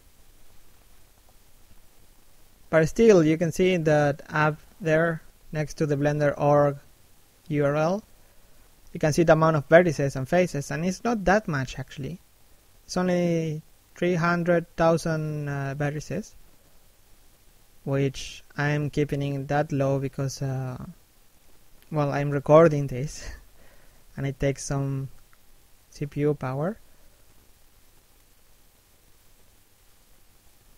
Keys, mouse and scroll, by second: 4.9 scroll down 1, 6.1 middle click, 7.2 shift+middle click, 7.6-8.1 scroll up 1, 8.1 middle click, 8.9 shift+middle click, 9.4 click, 21.2 middle click, 21.7 shift+middle click, 22.1 click, 27.2 shift+middle click, 27.7 middle click, 28.4 shift+middle click, 29.1 click.